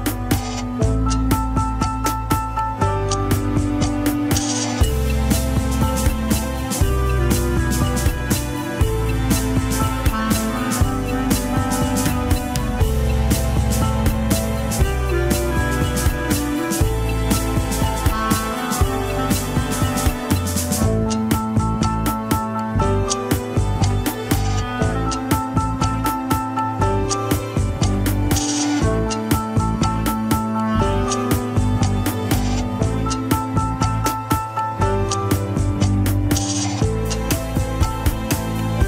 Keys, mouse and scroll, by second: 9.3 click, 10.4 click, 11.4-12.5 drag, 13.8 click, 14.9 click, 16.2 shift+click, 16.4 shift+middle click, 16.8 shift+click, 17.3 ctrl+Tab, 18.4 ctrl+click, 18.5 alt+z, 18.7-21.0 middle drag, 21.0 alt+z, 21.9 ctrl+click, 23.2 ctrl+click, 26.3 ctrl+click, 26.4 alt+z, 26.6 middle click, 27.3 alt+z, 31.4-32.5 drag, 32.5 middle click, 33.0-35.2 drag, 35.2 middle click, 35.9-38.8 drag.